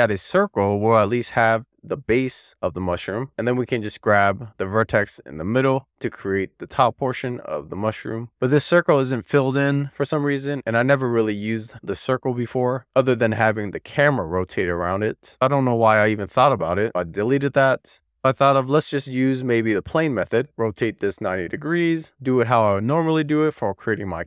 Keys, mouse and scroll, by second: 0.7 middle click, 2.2-2.7 scroll down 1, 2.7 Tab, 3.1 Tab, 4.0 alt+z, 4.7 middle click, 5.2 Tab, 6.1 click, 6.8 click, 7.3 click, 7.9 click, 8.2 Tab, 9.0 Tab, 9.4 middle click, 10.2 middle click, 11.7 Tab, 14.2 click, 16.8 Tab, 17.1 click, 17.4 x, 18.1-19.8 scroll up 1, 18.6 shift+a, 19.8-20.4 scroll up 1, 20.4 e, 20.5 click, 22.0 9, 23.9 w.